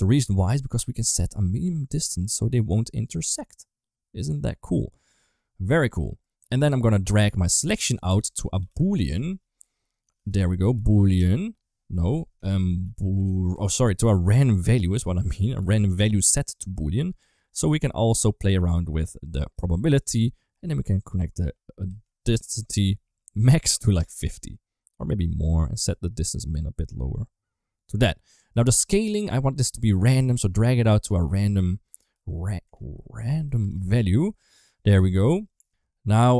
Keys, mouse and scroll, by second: 1.0-5.6 shift+drag, 6.1 middle click, 7.5-11.9 drag, 8.5 o, 12.2 shift+a, 14.2-16.6 drag, 17.2-19.4 drag, 19.7 middle click, 20.8-23.8 drag, 25.1 click, 25.8-27.9 shift+drag, 28.3 middle click, 29.6-34.5 drag, 34.9 middle click, 35.5 ctrl+x.